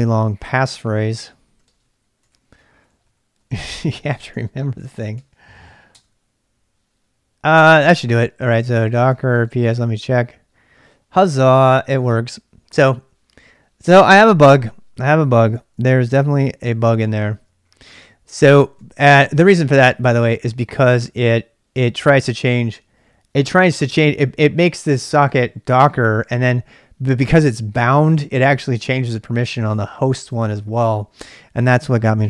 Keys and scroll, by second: 16.3 ctrl+alt+y, 18.7 ctrl+c, 19.0-19.8 typing.